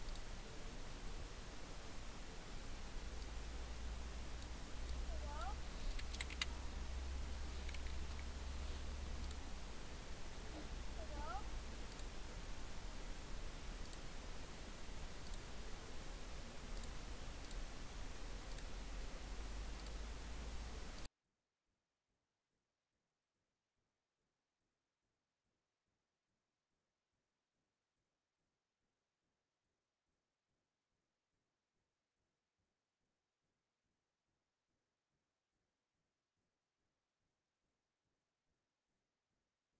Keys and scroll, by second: 6.3 a, 7.8 BackSpace, 7.9 BackSpace, 8.1 BackSpace, 27.0-28.8 typing, 30.0 m, 30.3 u, 30.4 b, 30.7 n, 31.7 BackSpace, 32.2 BackSpace, 33.5 b, 33.7 i, 33.8 n, 34.3 space.